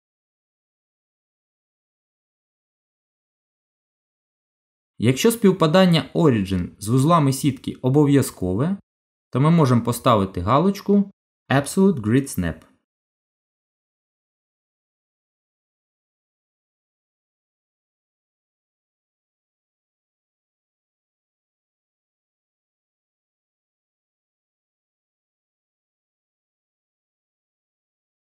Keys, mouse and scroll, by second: 8.9 click, 15.1 g, 22.1-22.5 scroll down 2, 22.5 middle click, 24.1 shift+middle click, 24.8 middle click, 25.9-27.2 scroll up 2.